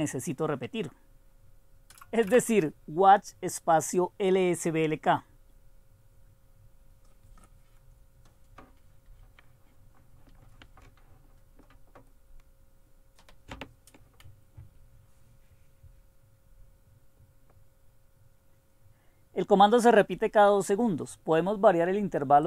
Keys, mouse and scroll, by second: 0.0-0.3 typing, 2.3 Return.